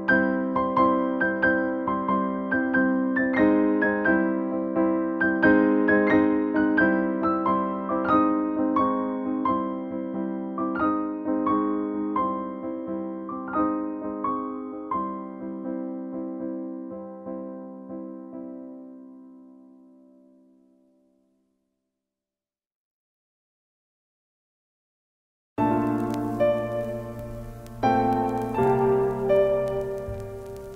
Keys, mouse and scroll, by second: 1.9 click, 2.4 Down, 4.5 Up, 7.7-9.2 drag, 9.5 Down, 11.3 click, 14.0-15.6 drag, 15.9 Up, 19.9 click, 21.7-26.7 shift+drag, 26.7-28.6 drag, 29.4 ctrl+space, 29.6 ctrl+click, 29.9 ctrl+space, 30.6 click.